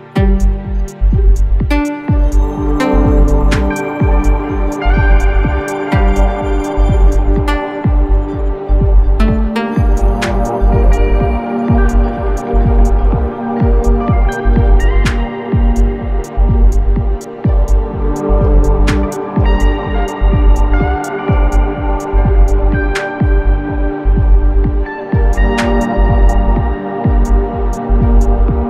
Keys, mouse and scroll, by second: 2.0 click, 6.5 click, 8.5 click, 11.0 4, 13.4-15.6 drag, 15.6 3, 18.8 click, 22.0 ctrl+space, 22.2 ctrl+click, 22.5 ctrl+space, 23.1 click, 23.5 space, 27.0 click.